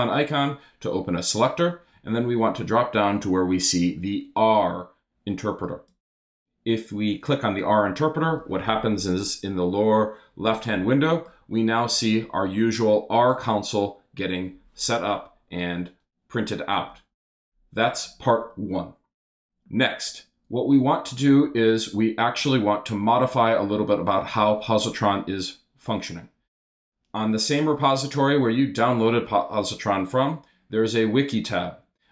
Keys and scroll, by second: 21.8 super+Tab.